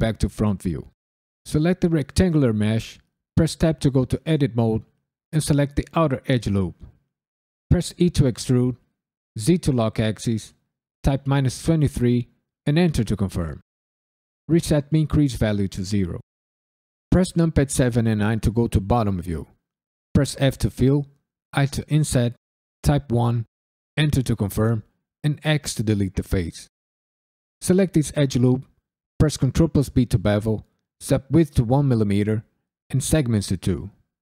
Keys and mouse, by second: 1.3 click, 3.3 Tab, 5.3 alt+click, 8.0 e, 9.3 z, 11.0 KP_Subtract, 11.3 KP_2, 11.5 KP_3, 12.6 KP_Enter, 15.0-16.6 drag, 17.5 KP_7, 18.1 KP_9, 20.3 f, 21.5 i, 22.8 KP_1, 23.9 KP_Enter, 25.4 x, 27.5 alt+click, 29.4 ctrl+b, 30.1 click, 31.0-33.6 drag.